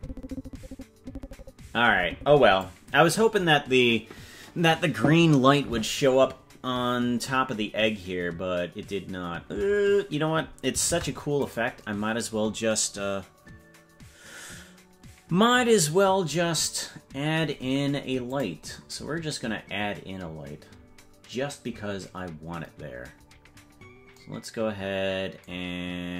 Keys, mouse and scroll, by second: 10.8 ctrl+Tab, 18.3 click, 23.8-24.2 scroll down 4.